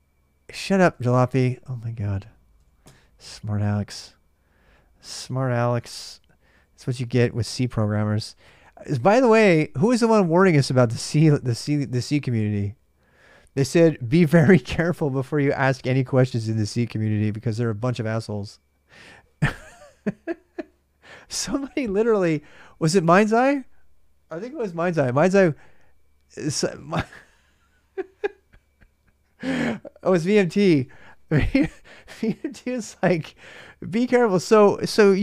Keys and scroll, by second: 0.7 typing, 2.4 typing, 5.7 ctrl+a, 5.9 ctrl+a, 7.2-9.1 typing.